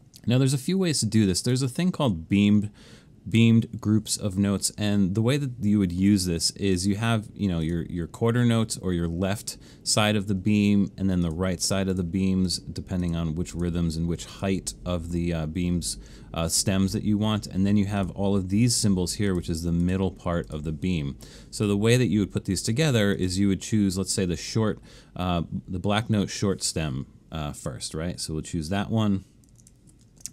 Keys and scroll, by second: 30.0 alt+shift+super+s.